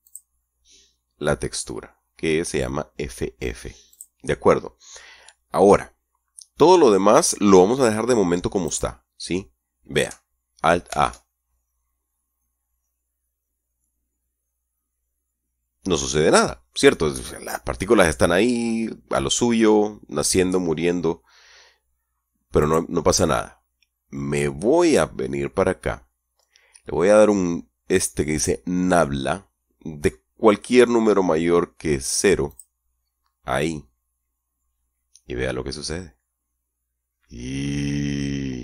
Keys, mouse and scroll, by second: 0.3 click, 4.2 click, 8.9 right click, 11.1 alt+a, 22.9 right click, 32.8 click.